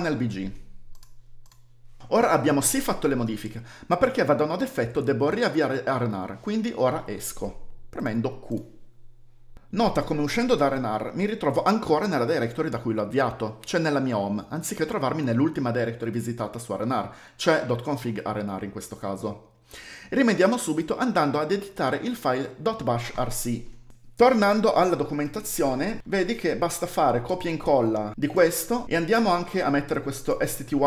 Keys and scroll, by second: 1.4-2.7 typing, 8.4 q, 21.7-23.9 typing, 24.6 F11.